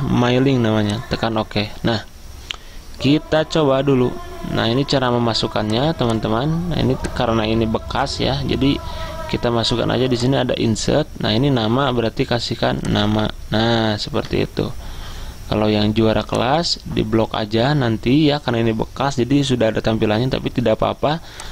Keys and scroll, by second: 14.7 Return.